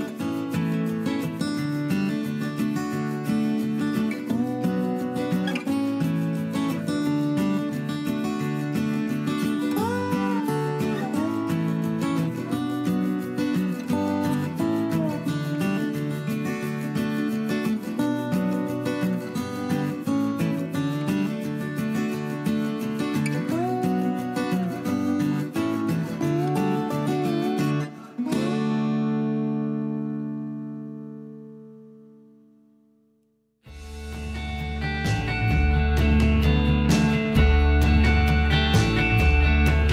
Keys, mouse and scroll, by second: 8.2 F2, 23.0 0.